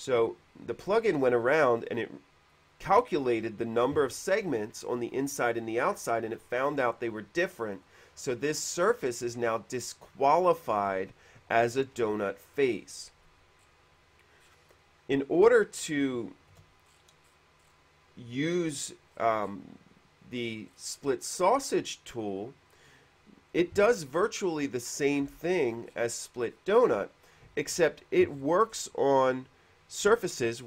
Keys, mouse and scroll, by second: 1.1 middle click, 1.4-1.9 scroll up 4, 1.6 middle click, 1.9 middle click, 8.0 click, 13.2 middle click, 13.8 scroll down 1, 14.7 scroll down 1, 14.8 middle click, 16.4 shift+middle click, 17.0-17.6 scroll up 4, 17.6 middle click, 19.4 middle click, 20.9 middle click, 25.6-27.0 middle drag, 25.7 scroll up 1, 28.6 middle click, 29.0 middle click, 30.5 middle click.